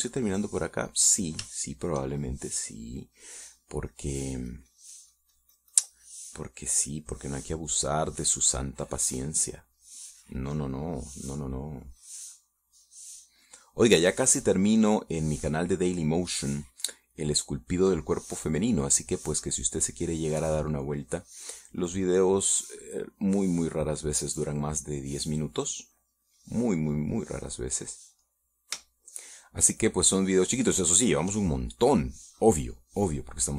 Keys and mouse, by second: 0.3 click, 1.3 click, 2.0 click, 3.0 shift+middle click, 3.8 shift+middle click, 5.2-7.8 drag, 8.0 middle click, 8.6-15.6 drag, 15.8 middle click, 17.4 middle click, 18.3-19.4 drag, 20.6-23.4 drag, 23.6-24.6 middle drag, 25.6 middle click, 26.6 middle click, 27.4-29.4 drag, 29.7 middle click, 30.3 shift+middle click, 31.5 shift+middle click, 32.4 shift+middle click.